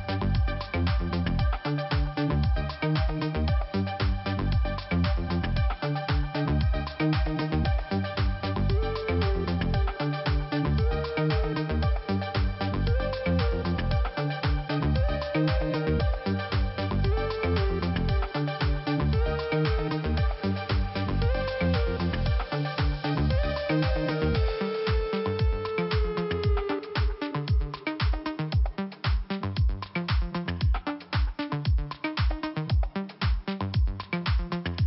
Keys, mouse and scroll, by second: 4.5 click, 7.0 click, 9.5 click, 9.5 click, 9.9 scroll up 1, 12.1 click, 12.9 click, 13.0 click, 13.1 click, 13.7 click, 14.3 click, 19.3 click, 19.6 click, 20.3 click, 20.5 click, 20.6 click, 21.1 click, 21.7 click, 24.1 click, 29.2 click, 30.5 click, 32.0 click.